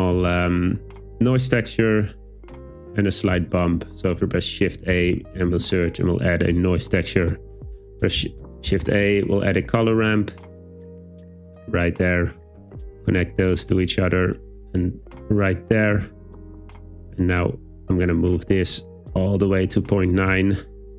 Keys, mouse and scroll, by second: 0.3 Tab, 4.2 shift+a, 7.7 shift+a, 12.6 click, 14.7 click, 18.4-19.5 drag, 20.5-20.9 drag.